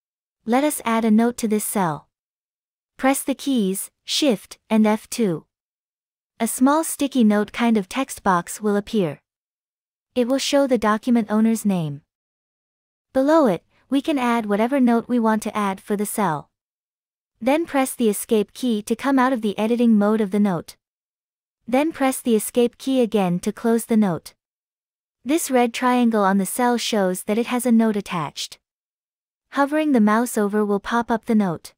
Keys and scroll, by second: 5.6 shift+F2, 19.9 Escape, 22.5 Escape, 24.1 Escape.